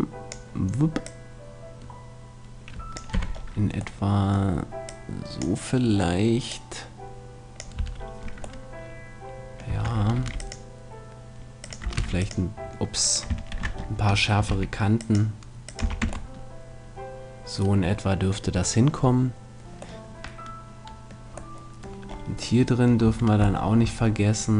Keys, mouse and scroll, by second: 1.0-2.8 drag, 3.1 z, 3.3 middle click, 4.9-8.3 drag, 4.9-5.9 middle drag, 7.8 Tab, 7.9 middle click, 9.7 Tab, 10.1 ctrl+r, 11.7-13.6 drag, 11.9 ctrl+r, 13.1-14.8 right drag, 13.5 ctrl+z, 14.5 ctrl+r, 15.8 click, 15.8 a, 16.0 Tab, 18.5-22.6 middle drag, 23.1 Tab.